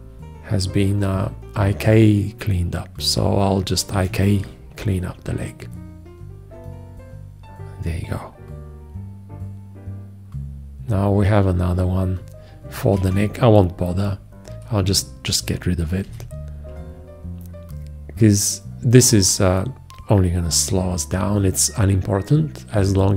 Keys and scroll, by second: 4.2 alt+q, 13.2 alt+q, 16.3 shift+x.